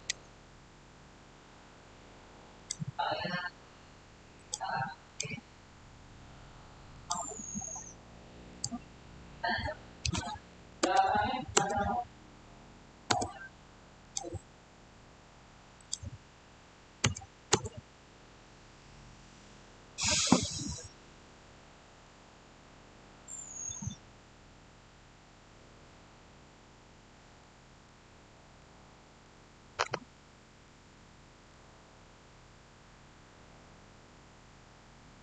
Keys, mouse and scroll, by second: 2.5 click, 10.3-11.2 typing, 11.4 Return, 13.9 click, 16.9 typing, 17.4 Return, 27.4 shift+Return, 28.5-30.9 middle drag, 30.9 scroll up 1, 31.4-35.2 shift+middle drag.